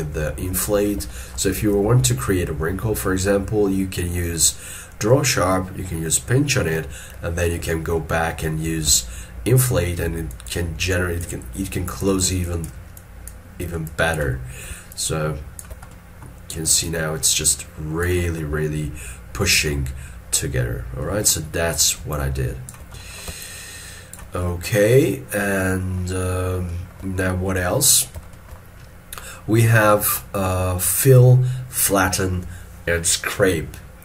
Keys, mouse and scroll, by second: 1.2 shift+middle click, 2.7-5.7 scroll up 1, 7.9 scroll down 1, 13.1 double click, 15.0 shift+click, 16.0 middle click, 16.9 shift+click, 18.5 middle click, 22.2 shift+click, 23.1 middle click, 23.5 shift+click, 24.6 middle click, 26.8 shift+middle click, 28.4 shift+middle click.